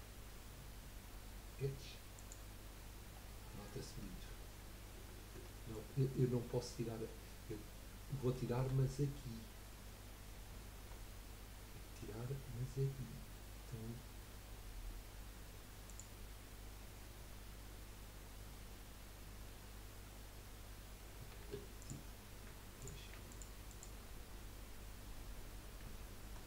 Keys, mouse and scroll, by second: 3.1-3.5 scroll down 3, 3.5-5.0 middle drag, 5.0 ctrl+z, 5.6 middle click, 6.0-6.9 scroll up 4, 8.4 shift+middle click, 8.8-10.3 scroll up 5, 10.3 scroll up 1, 11.0-11.8 scroll up 7, 15.9 click, 21.8 alt+shift+click, 22.8 click, 23.3 alt+shift+click, 23.7 alt+shift+click, 24.3-24.6 scroll down 4, 25.9 shift+middle click.